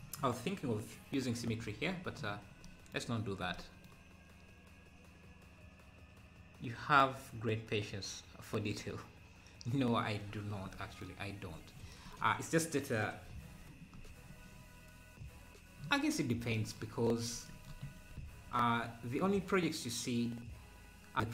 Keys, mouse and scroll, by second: 13.0 scroll up 1, 18.2 ctrl+b.